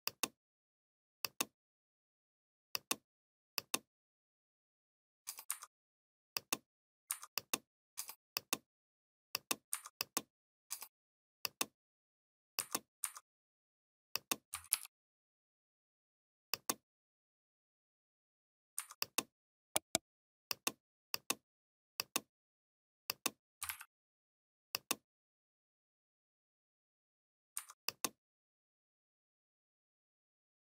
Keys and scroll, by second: 14.5 ctrl+g, 23.5 ctrl+z.